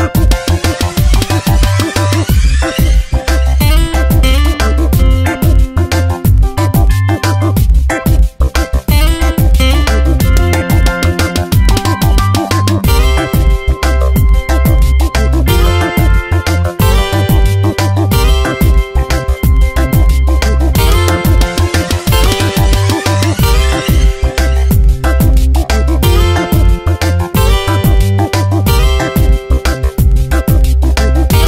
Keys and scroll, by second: 6.8 Tab, 9.2 space, 11.7 ctrl+shift+n, 12.1 Return, 12.5 alt+BackSpace, 13.3 ctrl+d, 13.6 v, 14.0 shift+Left, 15.1 Up, 16.4 Down, 23.3 Return, 24.2 ctrl+[, 25.3 shift+Down, 27.6 ctrl+j, 31.2 Return.